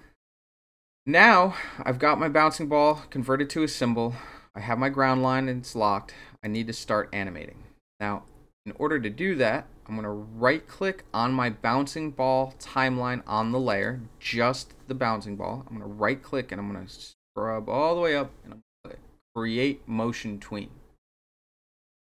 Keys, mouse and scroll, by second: 2.8 click, 6.4 click, 13.7 right click, 21.2 click.